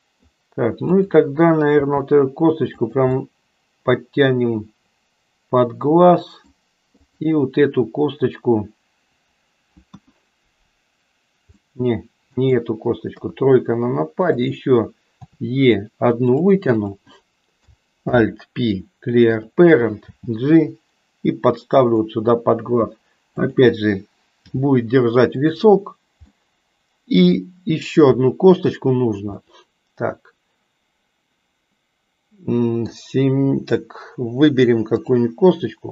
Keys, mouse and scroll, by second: 0.8 click, 1.9 g, 3.1-6.5 middle drag, 7.0 click, 9.9 KP_1, 11.6-12.8 middle drag, 13.1 KP_3, 14.3 click, 15.3 e, 18.0 alt+p, 20.0 g, 23.3 click, 24.4 g, 26.3-27.4 middle drag, 29.3-33.1 middle drag.